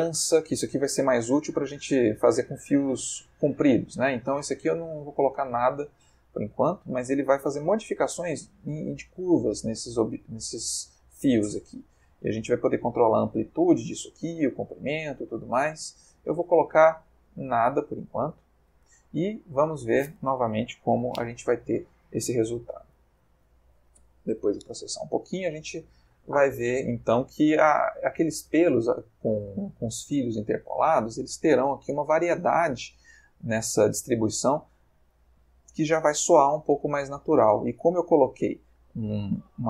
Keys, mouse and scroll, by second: 4.7-8.0 drag, 8.8-10.3 middle drag, 10.4 ctrl+middle click, 11.9-14.9 drag, 14.3 Escape, 15.3-18.5 drag, 19.0-19.8 ctrl+middle drag, 20.5 F12, 34.3-35.4 ctrl+middle drag.